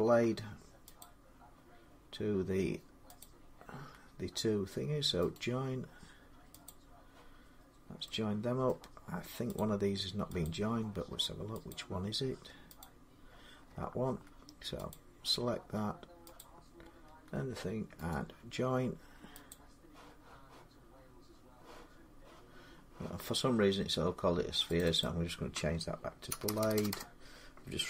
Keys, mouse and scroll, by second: 3.1 click, 5.1 right click, 6.5 click, 8.5 middle click, 9.4 click, 10.2 click, 11.5 click, 12.6 click, 14.7 click, 16.2 shift+click, 16.4 shift+click, 17.9 right click, 19.3 click, 20.6 scroll, 24.6 middle click, 24.6 click, 24.8 click, 26.1-27.8 typing.